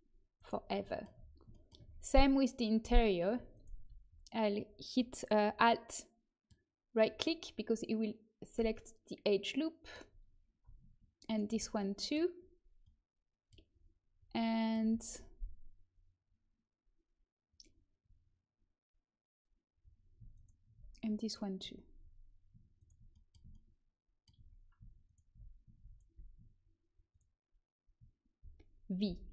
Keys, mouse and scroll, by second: 0.8-4.6 middle drag, 3.5-5.6 right drag, 5.6-8.9 middle drag, 11.2-13.0 right drag, 20.3-29.0 right drag, 25.0-29.0 drag, 29.0 v.